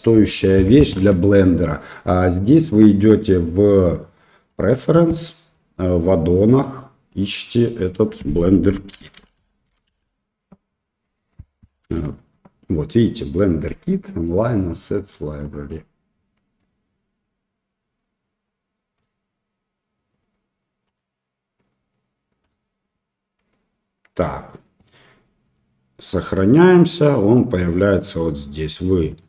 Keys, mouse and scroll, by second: 2.5 click, 4.0 click, 27.2 click, 29.1 click.